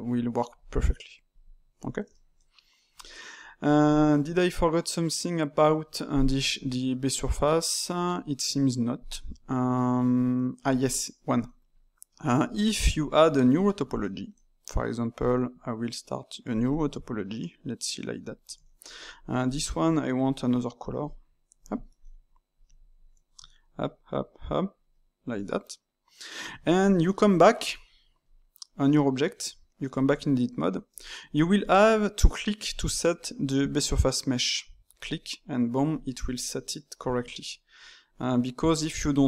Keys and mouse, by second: 1.3 click, 2.1-6.0 ctrl+middle drag, 7.2 click, 11.1-12.4 middle drag, 12.4 Tab, 12.9 click, 13.4-16.5 middle drag, 16.5-18.3 drag, 18.6-19.4 ctrl+middle drag, 19.4 click, 20.2 click, 22.0 middle click, 22.5 click, 22.8 shift+click, 23.5 ctrl+right click, 23.9 ctrl+right click, 24.3 ctrl+right click, 24.8 ctrl+right click, 25.3-26.4 middle drag, 26.4 Tab, 27.0 shift+middle click, 27.6 click, 28.2-29.2 middle drag, 29.2 Tab, 30.1-34.0 shift+middle drag, 34.9-36.4 drag, 36.4 middle click, 37.1 Tab, 38.0 click, 38.6 Tab, 39.1 click.